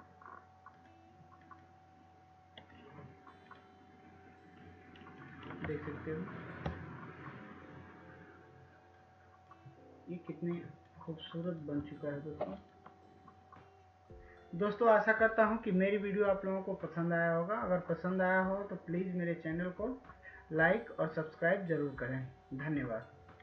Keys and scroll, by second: 13.5 ctrl+shift+z.